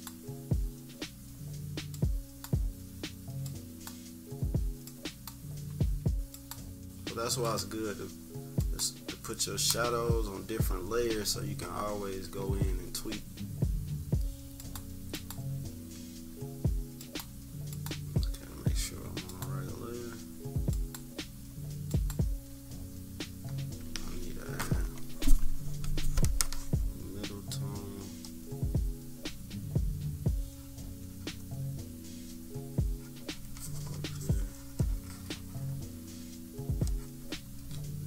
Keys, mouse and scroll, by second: 1.9 click, 3.4 click, 4.8 click, 6.3 click, 7.4-10.0 drag, 10.0 scroll up 2, 10.6 space, 10.7 -, 11.0 scroll down 1, 11.7 scroll up 1, 12.2 =, 12.4 =, 12.5 scroll down 1, 14.5 click, 17.0 click, 19.2-23.4 drag, 23.4 scroll up 1, 23.8 =, 24.0 scroll down 1, 24.1 =, 24.5 scroll up 1, 25.8-27.2 drag, 28.2-34.7 drag, 35.2-35.8 scroll up 2, 36.9-38.0 drag.